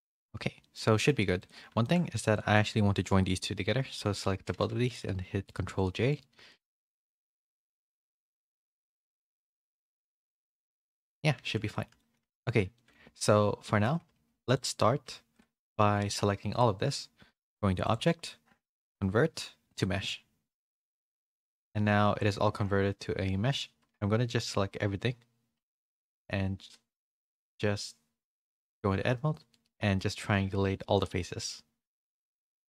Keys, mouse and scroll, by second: 0.6 middle click, 0.9 shift+middle click, 1.4 click, 1.8 shift+middle click, 2.3-3.9 shift+drag, 3.9 ctrl+j, 4.5 a, 4.9 click, 4.9 a, 5.0 g, 5.8 click, 6.4 middle click, 6.4 g, 6.7 g, 7.4 middle click, 7.4 a, 7.4 g, 8.2 middle click, 9.2 shift+middle click, 9.6-11.0 middle drag, 11.7 shift+middle click, 11.7 shift+a, 11.9 middle click, 12.7 shift+middle click, 12.7 a, 13.6 middle click, 13.6 a, 14.4 click, 14.4 a, 16.5-20.6 drag, 28.4 a, 28.4 3.